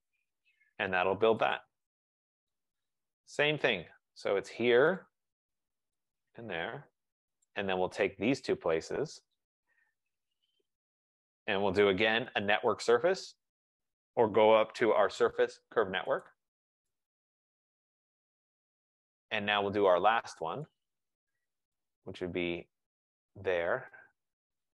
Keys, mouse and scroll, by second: 1.7 click, 2.6 click, 3.7 click, 5.2 click, 6.2 shift+click, 7.5 click, 9.6 click, 10.3 shift+click, 12.5-13.4 typing, 16.3 click, 18.4 right click, 18.8 middle click, 19.0 middle click, 19.1 middle click, 19.7 middle click, 20.4 middle click, 20.8 click, 21.9 click, 23.6 click.